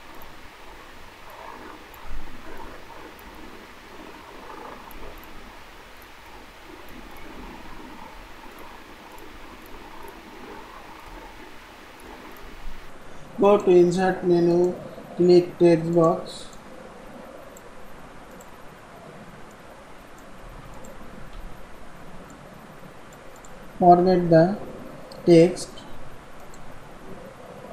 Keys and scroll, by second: 7.3 ctrl+a, 20.4 ctrl+c, 21.2 ctrl+v, 23.7 ctrl+a.